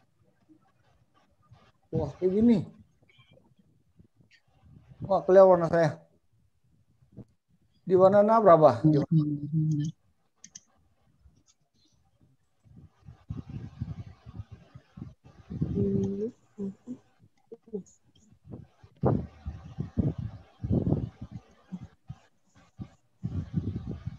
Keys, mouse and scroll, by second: 14.6 click, 24.0 click.